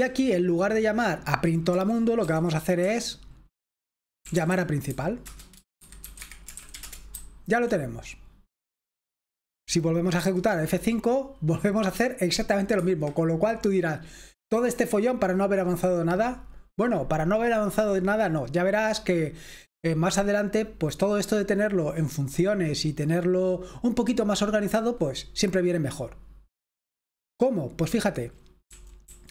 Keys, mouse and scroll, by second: 1.7-2.8 typing, 4.0-7.2 typing, 10.2 F5, 12.8 Escape, 28.7-29.3 typing.